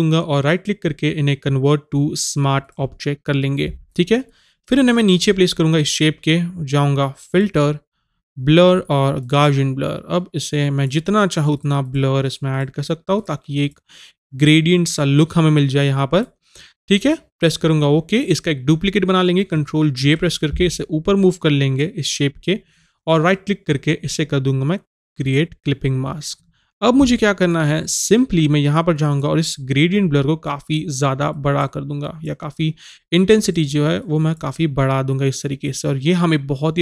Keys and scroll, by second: 20.0 ctrl+j.